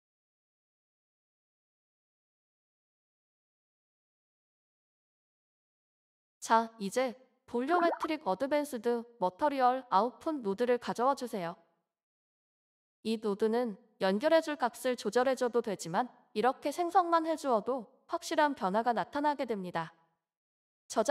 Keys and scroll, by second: 0.9 Tab, 1.1 Right, 1.3 Right, 1.5 Right, 1.6 Right, 1.8 Right, 2.1-2.9 typing, 7.5-10.8 typing, 12.6-13.3 typing.